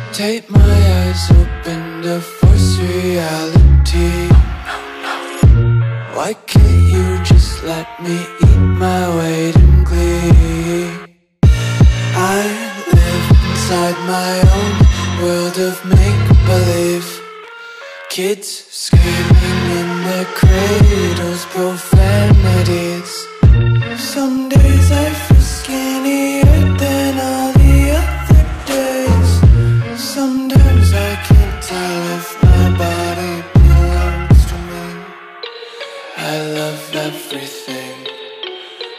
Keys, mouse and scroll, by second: 0.1 s, 1.7 click, 7.1 t, 7.6 click, 9.9 Return, 11.7 ctrl+s, 12.7 click, 17.5 click, 18.7 Delete, 19.6 click, 22.5 ctrl+s, 23.7 click, 28.6 Delete, 29.3 click.